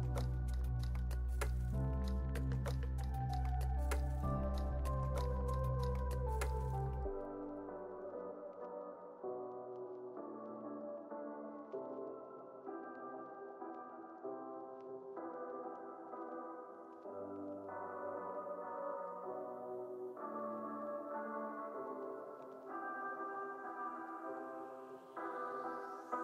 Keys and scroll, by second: 2.4 r, 4.9 x, 12.2 super+s, 16.3 w, 20.6 x, 21.7 w, 25.5 z.